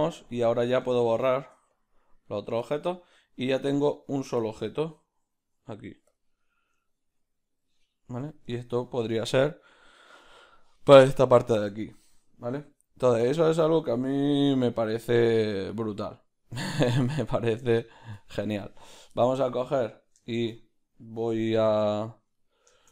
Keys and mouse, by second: 0.3-1.8 right drag, 1.8 x, 2.3 right click, 2.6-18.8 ctrl+middle drag, 4.5 z, 6.1 z, 7.6 z, 13.3 q, 14.4 g, 18.8 right click, 19.1-22.9 ctrl+shift+middle drag.